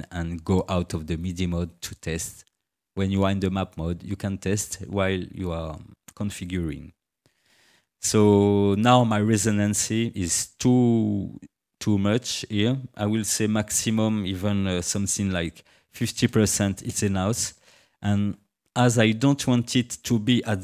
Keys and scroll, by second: 15.7 5, 16.2 0, 16.9 Return.